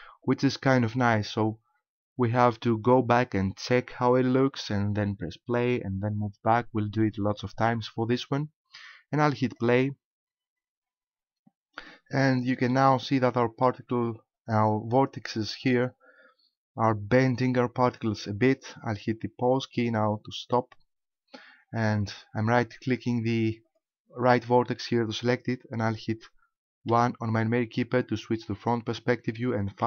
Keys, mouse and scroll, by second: 9.5 click, 12.7 middle click, 19.9 click, 23.7 right click, 26.9 KP_1, 29.7 KP_5.